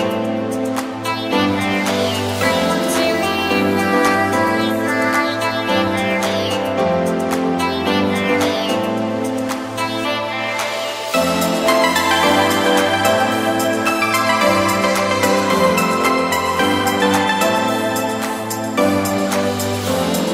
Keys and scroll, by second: 2.7 s.